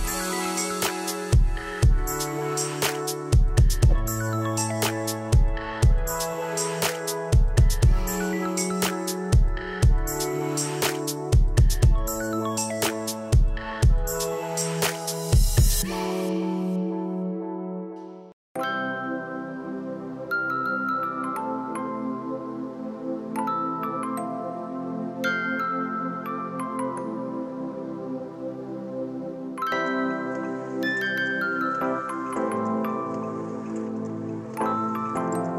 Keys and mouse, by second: 3.0 Escape, 3.2 click, 4.3 right click, 4.7 click, 5.3 ctrl+click, 5.5 right click, 6.0 click, 6.3 right click, 7.1 click, 8.4 Delete, 9.4 y, 9.5 click, 9.9 Delete, 10.5 click, 10.5 right click, 10.9 click, 12.0 ctrl+1, 12.2 click, 15.5 alt+y, 16.7 click, 21.7 Return, 22.9 click, 25.4 right click, 25.7 click, 28.5 click, 29.5 Return, 31.1 click, 33.7 click, 35.2 KP_0, 35.4 Return.